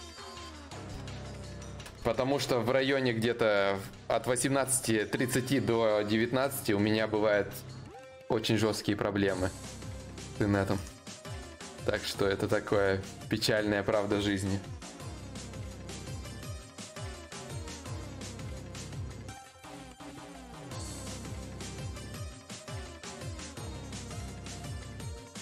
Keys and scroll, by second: 21.1 4.